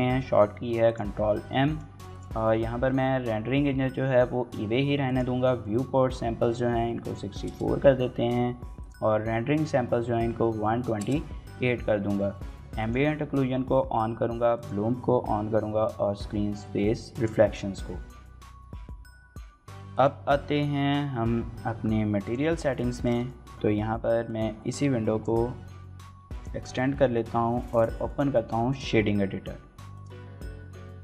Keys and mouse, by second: 0.7 click, 1.6 click, 5.0-8.2 drag, 8.6-11.4 drag, 12.6 click, 14.3 click, 17.0 click, 22.7 shift+middle click, 23.0 middle drag, 24.1-25.3 drag.